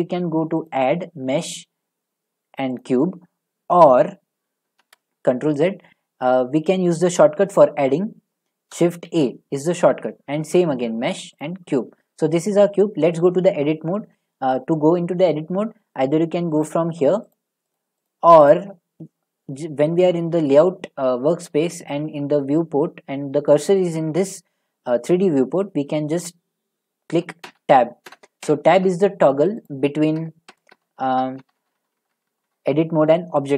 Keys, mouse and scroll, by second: 0.7 click, 2.8 click, 4.8 ctrl+z, 9.1 a, 11.4 click, 16.6 click, 17.4 click, 17.7 click, 18.1 click, 18.5 click, 27.4 Tab, 28.1 Tab, 28.5 Tab, 28.5 q, 28.8 Tab, 29.7 click, 30.2 Tab, 30.5 Tab, 30.7 Tab, 31.0 Tab, 31.2 Tab, 31.4 Tab, 31.6 Tab, 31.8 Tab, 32.1 Tab, 32.3 Tab, 32.5 Tab, 32.9 Tab.